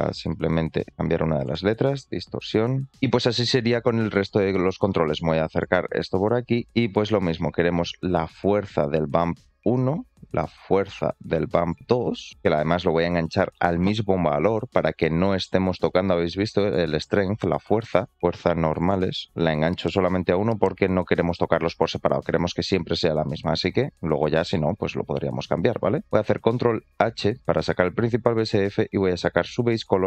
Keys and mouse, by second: 0.8 BackSpace, 3.9 shift+middle click, 5.4 click, 6.7 shift+middle click, 7.3 middle click, 8.3-9.4 drag, 10.6-11.9 drag, 15.5-16.6 drag, 18.1-20.1 drag, 28.7-30.0 drag.